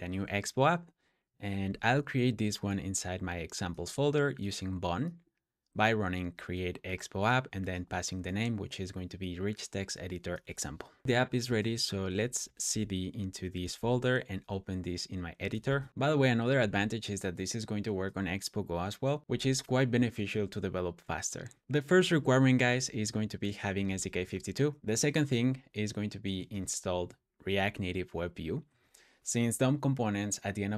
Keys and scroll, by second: 10.8-14.0 typing, 15.2-16.4 typing, 22.6 Escape, 22.6-24.9 typing, 26.3 super+v.